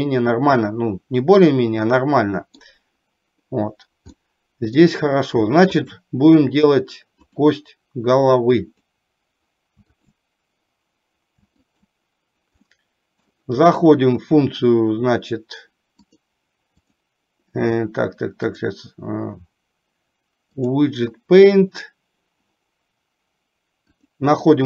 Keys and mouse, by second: 4.1 middle click, 5.9 shift+click, 8.7 click, 10.0 shift+click, 11.9 shift+click, 12.6 middle click, 16.0-17.2 drag, 18.5-20.9 drag, 24.1-24.6 drag.